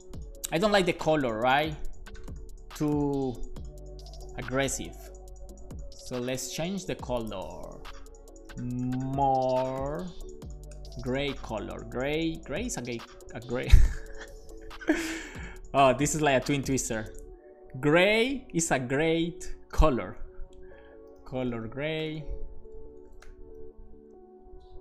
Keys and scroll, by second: 8.0 Return, 8.1-12.7 typing, 13.3 shift+Left, 21.0-23.7 typing.